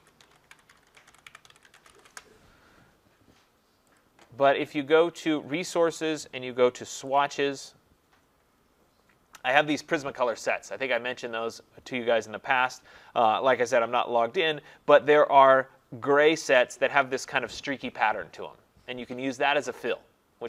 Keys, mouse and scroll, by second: 0.0-2.6 typing, 4.0 click, 7.2 click, 8.4-8.9 scroll down 5, 8.9 scroll.